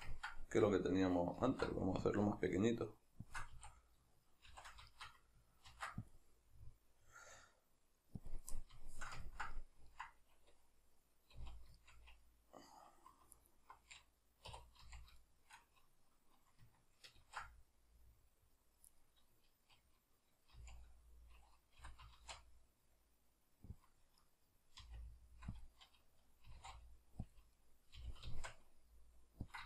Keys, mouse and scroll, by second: 1.5 alt+e, 3.4 shift+click, 3.5 a, 4.5 shift+n, 4.9 shift+middle click, 5.7 ctrl+r, 8.3 click, 8.6-13.4 middle drag, 11.4 z, 13.4 alt+right click, 14.5 2, 15.2-19.0 shift+middle drag, 17.2 ctrl+b, 19.0 right click, 20.6 z, 23.9 click, 24.2-25.7 middle drag, 24.9 r, 25.7 click, 26.5 s, 27.4 click, 27.6-29.6 middle drag, 28.0 g, 29.6 click.